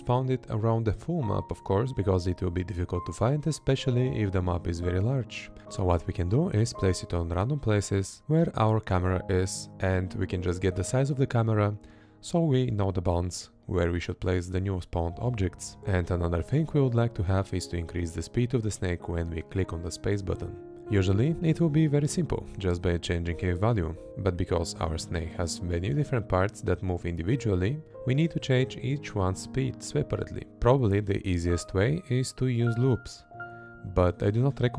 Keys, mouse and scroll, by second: 0.5 Left, 0.8 Left, 3.4 space, 4.6 Left, 6.4 Right, 7.9 Right, 8.8 Left, 9.3 Right, 9.7 Left, 10.5 Right, 11.0 Left, 12.1 Right, 13.6 Left, 16.4 Left, 17.8 Right, 19.4 space, 20.0 Left, 21.1 Left, 21.5 Right, 22.4 Left, 23.0 Right, 23.8 Left, 24.8 Right, 26.0 Left, 28.0 Right, 30.5 Right, 31.5 Right, 32.3 Left, 32.9 space, 33.1 Left.